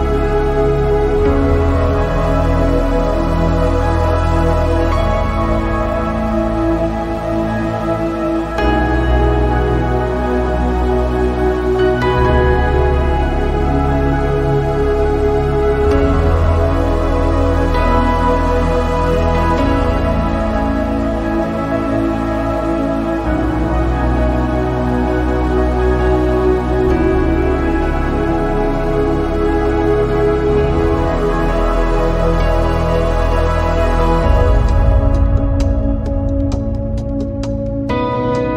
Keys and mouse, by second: 1.1 shift+click, 2.3 shift+click, 3.8 shift+click, 4.2 shift+click, 5.4 shift+click, 6.5 shift+click, 10.8 click, 17.7-18.9 drag, 19.7 shift+click, 20.7 shift+click, 21.6 shift+click, 22.8 shift+click, 23.7 click, 23.9-25.3 drag, 26.2 click, 27.4 click, 27.9 s, 29.7 click, 30.6 click, 31.8 s, 32.9 click, 33.6 x, 36.3 click, 38.0 click.